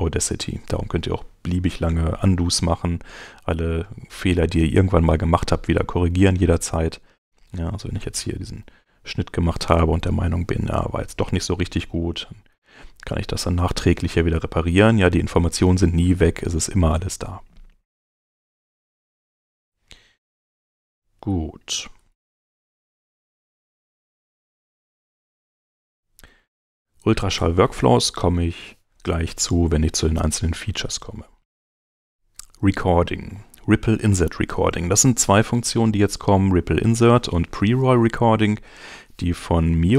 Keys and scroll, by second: 8.9 super+x, 18.7 super+z, 21.2 Escape, 21.8 super+Escape, 22.0 super+Tab.